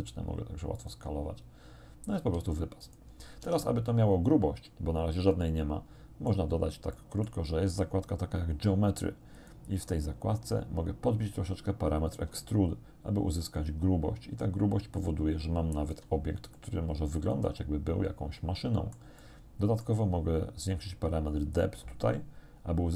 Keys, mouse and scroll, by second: 0.8 middle click, 2.2 g, 2.8 click, 3.4 Tab, 3.9-6.5 drag, 7.0 click, 9.4 middle click, 10.0-10.6 scroll down 1, 12.6-16.2 shift+drag, 16.6 click, 17.4-19.2 middle drag, 19.2-20.0 scroll up 1, 21.6-22.9 shift+drag.